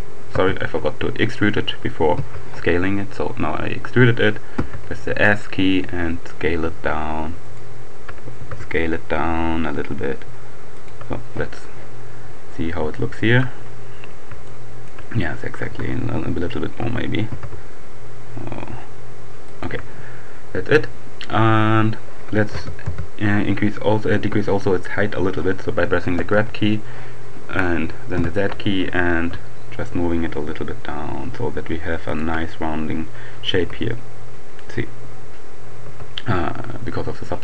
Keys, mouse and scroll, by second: 0.3 Escape, 1.8 e, 3.6 s, 7.4 shift+right click, 8.2 shift+s, 10.4 right click, 12.2-13.0 scroll up 2, 13.0 shift+middle click, 13.6-14.2 shift+scroll up 1, 14.5 shift+click, 15.6 d, 17.2 s, 19.1-20.2 shift+drag, 22.2 g, 22.8 z, 23.3 Escape, 25.0 g, 27.0 z, 32.0 shift+click, 33.5 Tab, 34.8 middle click, 35.8 Tab, 36.5-37.1 scroll down 1.